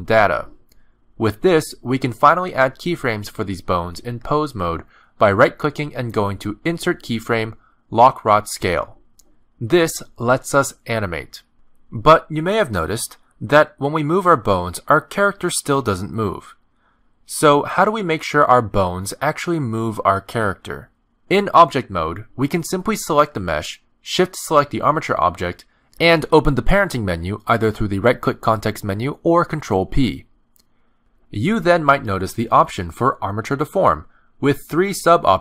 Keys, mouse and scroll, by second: 1.1 click, 4.7 click, 4.7 r, 6.6 right click, 12.3 click, 12.4 alt+r, 13.8 right click, 17.0 click, 21.8 x, 21.9 alt+r, 22.4 a, 22.8 alt+r, 22.9 alt+g, 24.2 ctrl+Tab, 25.1 click, 26.6 shift+click, 27.8 middle click, 29.3 right click.